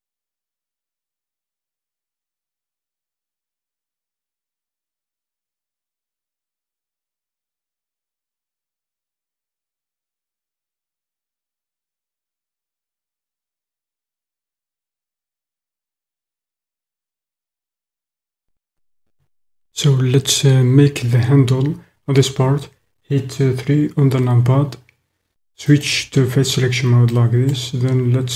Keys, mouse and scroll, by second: 7.1 middle click, 8.5 click, 8.6 middle click, 9.2 middle click, 11.3 middle click, 11.7-16.4 middle drag, 25.8 click, 27.1 click.